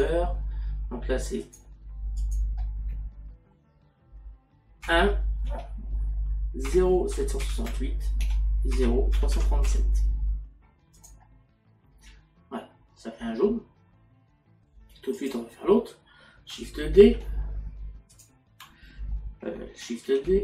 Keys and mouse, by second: 4.9 KP_1, 5.5 Tab, 8.2 KP_8, 8.7 Tab, 11.0 click, 18.6 click.